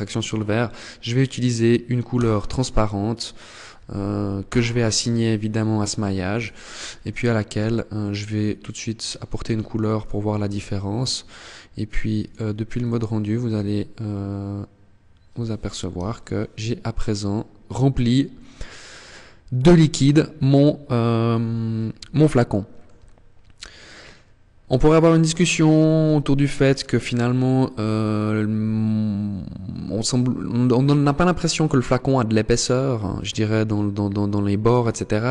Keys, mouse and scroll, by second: 3.7 click, 5.6 click, 9.7 Tab, 11.4 click, 14.8 KP_0, 20.5-21.2 scroll up 1, 21.2 shift+middle click, 22.3 scroll up 1, 24.1-24.4 scroll up 1, 25.2 shift+middle click.